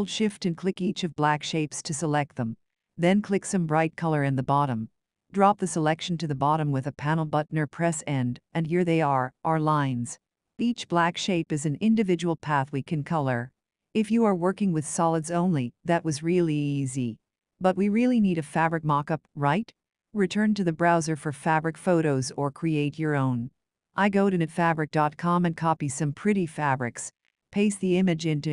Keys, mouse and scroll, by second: 1.9 shift+click, 6.0 click, 11.2-11.7 shift+scroll, 12.2 click, 13.7 shift+click, 15.6 click, 18.3 shift+click, 25.2 alt+Tab, 25.4 click, 28.4 click.